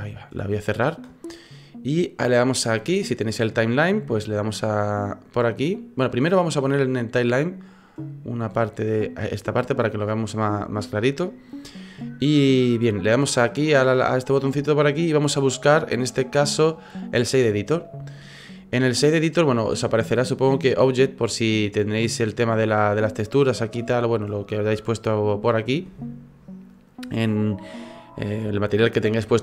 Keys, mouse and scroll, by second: 6.4 click, 13.4 click, 19.7 click.